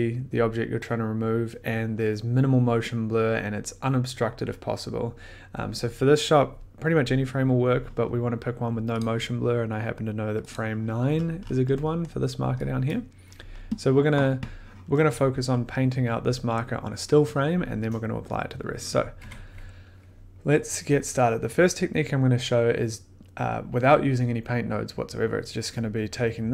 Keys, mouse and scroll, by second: 9.0 click, 10.5 click, 11.1-11.4 scroll, 12.0 scroll, 12.8 click, 13.4 scroll, 17.0 scroll, 19.0 click, 19.2 1, 20.9 middle click.